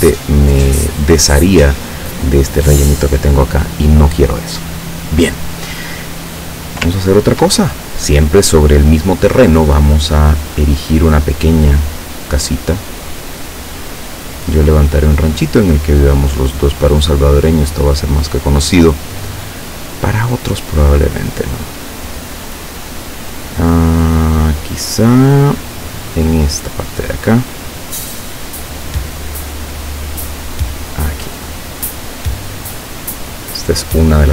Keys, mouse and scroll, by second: 2.7 click, 7.1-7.7 ctrl+scroll down 2, 7.7 ctrl+middle click, 11.2 click, 13.9 click, 18.0 click, 27.1 click, 31.9 click, 33.3 click.